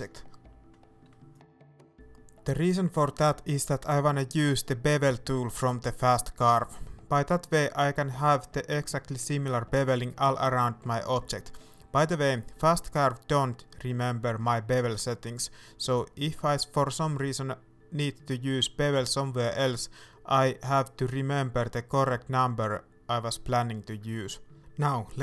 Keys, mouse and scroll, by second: 1.6 ctrl+j, 2.7 scroll up 1, 3.2 shift+middle click, 3.5-4.1 scroll down 2, 4.1 right click, 4.3-8.2 middle drag, 4.8-5.1 scroll up 2, 5.6-8.2 scroll up 2, 8.2-9.3 drag, 9.3-11.4 middle drag, 10.0-13.4 scroll up 9, 11.6-13.4 middle drag, 12.6 alt+a, 13.4-14.6 right drag, 14.6-21.1 drag, 20.3-20.7 scroll down 1, 21.1-25.2 middle drag, 21.5 alt+a, 22.1-22.4 scroll up 2.